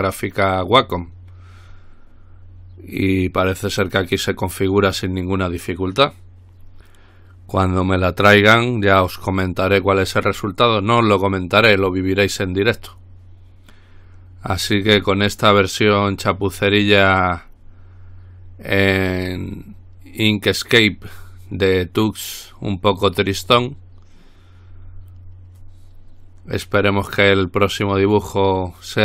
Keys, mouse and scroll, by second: 1.0 click, 4.0 click, 15.2-15.8 scroll up 2, 16.6-17.3 scroll down 2.